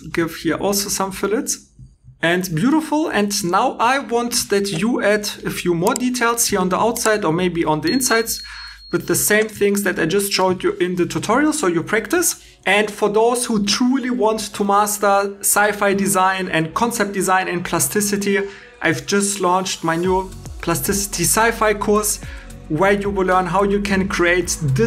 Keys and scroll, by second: 1.9 shift+e, 12.4 alt+e, 12.6 super+Tab, 15.8 super+Tab.